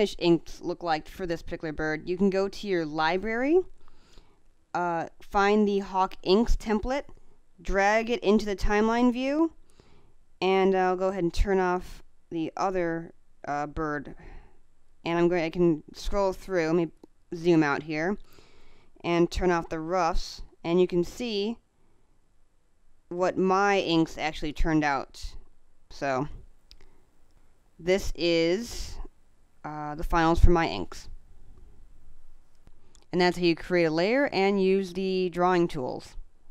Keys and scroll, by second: 17.3 space, 25.2 space.